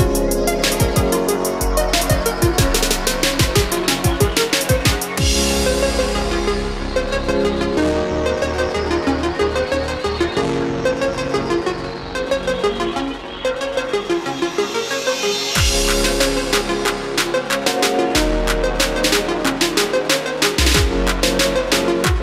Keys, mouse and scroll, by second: 10.3-13.6 middle drag, 14.2 click, 14.8-19.3 middle drag, 19.3-22.2 drag.